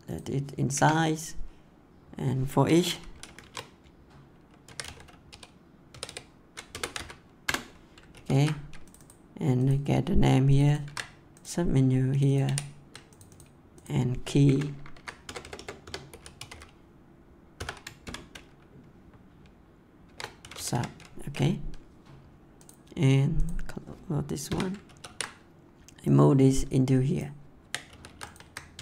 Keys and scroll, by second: 0.7 Return, 3.4-5.2 typing, 6.7 BackSpace, 6.8 c, 7.4 Return, 8.1 ctrl+s, 10.8 ctrl+c, 12.4 ctrl+v, 14.9 Right, 15.2 BackSpace, 16.1 k, 18.0 shift+., 20.0 shift+4, 20.3 s, 24.4 Delete, 24.8 ctrl+s, 27.5 ctrl+x, 28.7 Tab.